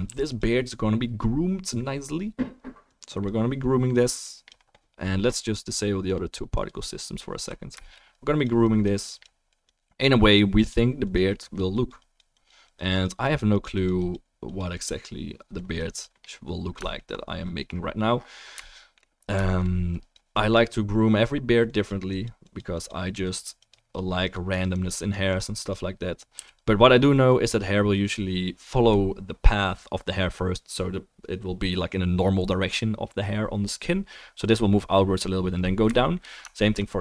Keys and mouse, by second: 0.1 f, 0.3-2.9 drag, 6.1 click, 6.6-8.1 drag, 16.7 alt+middle drag, 18.6 shift+middle click, 21.2-23.3 drag, 26.4 f, 26.6-27.3 drag.